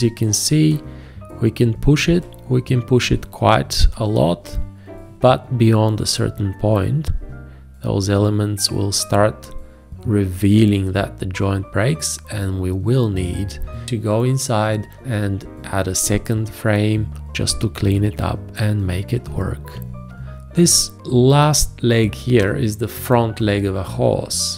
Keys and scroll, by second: 20.1 space.